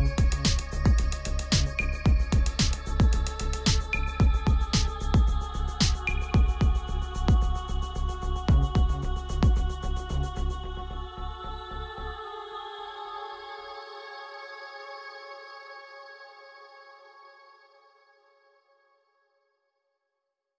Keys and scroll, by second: 1.8 ctrl+z.